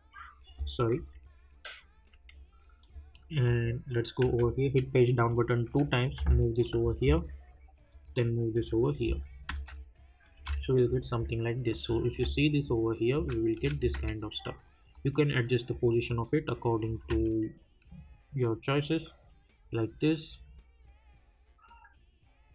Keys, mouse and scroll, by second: 3.4 click, 4.2 j, 6.0 click, 6.6 [, 7.9 click, 8.5 [, 9.0 scroll down 1, 10.8 click, 12.1 space, 14.9-17.0 drag, 17.0 space.